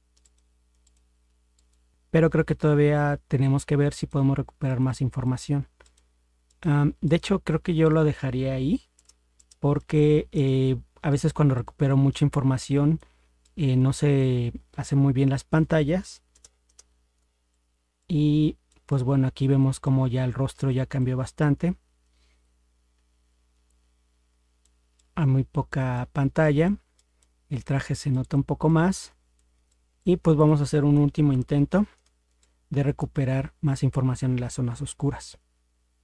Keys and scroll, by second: 1.9 ctrl+0, 9.0 ctrl++, 9.4 ctrl++, 16.3 ctrl++, 16.7 ctrl++, 31.3 ctrl+0.